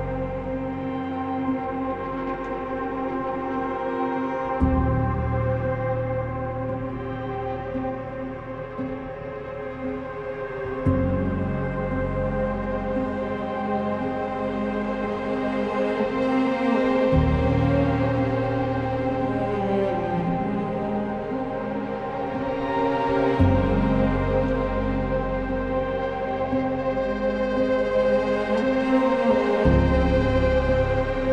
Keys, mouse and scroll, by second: 2.0 e, 6.5 b, 8.6 typing, 11.3 e, 12.9 e, 20.7-21.5 typing, 25.2 b, 25.3 ctrl+z.